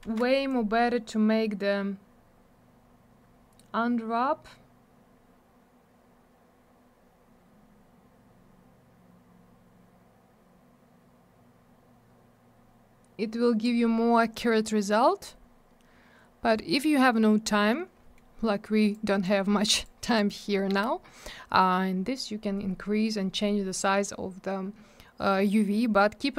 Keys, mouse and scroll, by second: 0.0 ctrl+z, 0.5 click, 15.7-16.0 scroll up 1, 18.0 scroll down 1, 18.9 click, 19.8 click.